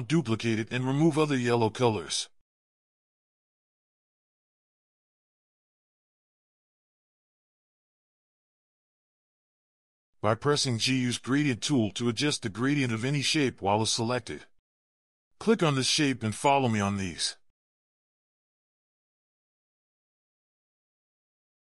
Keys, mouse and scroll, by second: 0.8 alt+click, 3.8 double click, 7.9 double click, 10.2 g, 18.9 ctrl+click, 19.9 ctrl+click, 20.1 g, 21.6 ctrl+click.